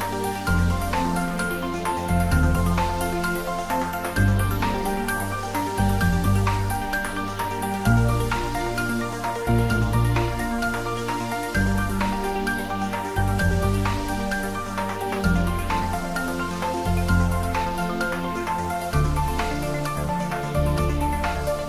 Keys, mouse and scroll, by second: 3.5 r, 13.0 Right, 16.2 Right.